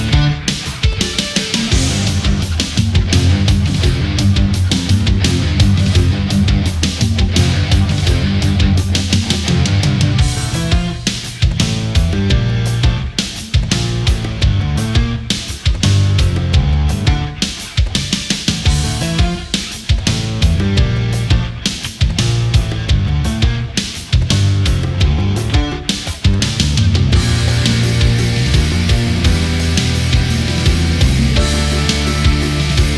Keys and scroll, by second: 5.1 ctrl+-, 5.9 ctrl+-, 6.1 ctrl+=, 7.2 Delete, 7.5 ctrl+a, 8.1 ctrl+g, 9.0 ctrl+z, 10.0 ctrl+0, 14.3 shift+t, 14.4 g, 14.5 e, 14.9 r, 17.5 Down, 18.5 Up, 18.7 Down, 19.0 Up, 19.3 Down, 21.4 ctrl+a, 26.6 ctrl+0.